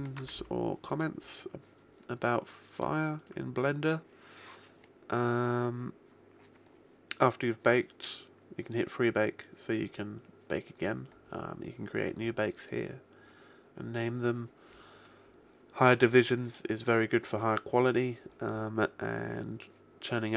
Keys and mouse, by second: 3.1 click, 8.5 click, 13.7-15.3 middle drag, 19.7-20.3 middle drag.